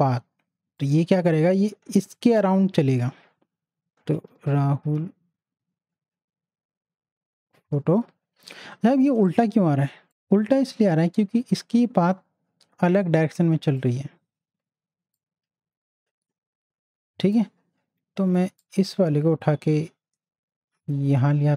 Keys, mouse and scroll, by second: 3.7-6.3 typing, 7.5 o, 13.8 click, 15.5-18.6 drag, 18.9-21.5 drag.